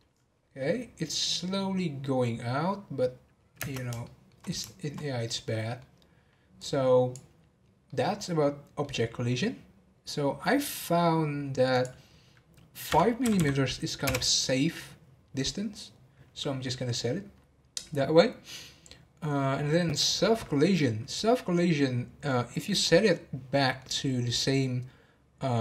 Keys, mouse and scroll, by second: 3.8 space, 4.0-5.3 shift+middle drag, 5.3 scroll down 1, 5.5-6.6 middle drag, 6.6-7.9 drag, 7.9-11.0 middle drag, 11.7-13.4 drag, 13.4 m, 23.6-25.6 middle drag.